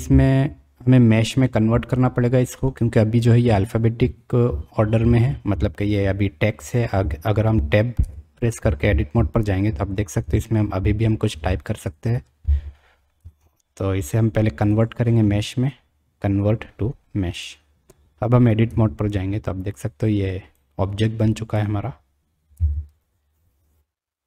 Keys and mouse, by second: 2.4 click, 8.0 Tab, 11.3 g, 11.7 BackSpace, 13.2 Tab, 18.7 Tab, 19.9 click, 21.2 click, 22.5 Tab.